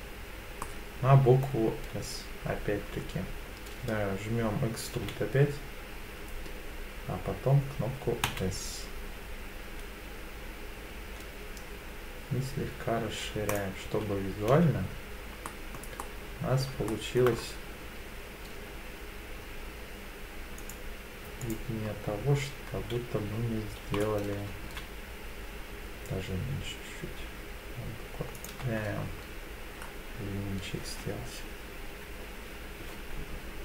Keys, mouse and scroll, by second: 0.6 middle click, 5.0 e, 8.2 s, 13.5 click, 13.9 z, 14.5 z, 15.5 middle click, 16.0 middle click, 16.9 shift+middle click, 17.3 scroll up 1, 19.1-20.0 scroll up 2, 20.6 click, 21.4 alt+click, 23.8 g, 24.6 z, 28.3 click, 28.6 Tab, 29.2-29.8 scroll down 3, 29.8-31.4 scroll up 2, 31.8-32.4 scroll up 1.